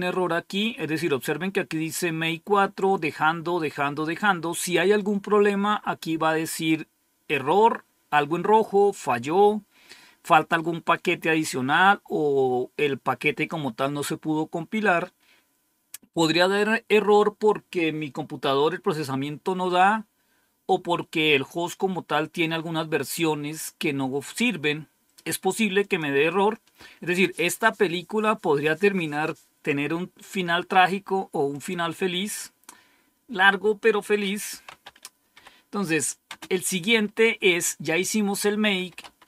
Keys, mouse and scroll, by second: 25.7 click, 31.5 click, 34.2-36.2 typing, 38.5-39.2 typing.